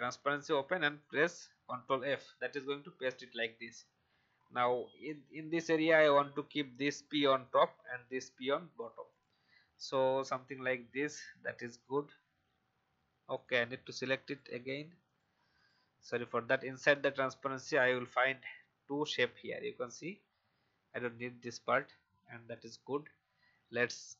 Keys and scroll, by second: 5.1 shift+e, 10.1 v, 17.5 Delete, 20.4 Delete.